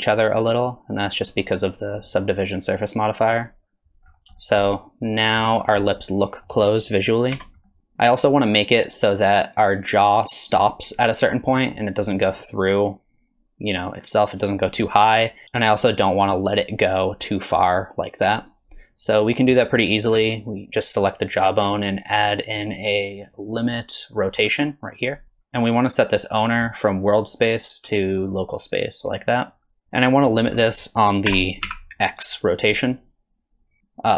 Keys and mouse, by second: 4.4 shift+middle click, 4.7 middle click, 5.8 middle click, 7.3 Tab, 7.7 middle click, 21.8-24.3 drag, 26.6-28.3 drag, 30.0 middle drag, 31.3 r, 33.5 click.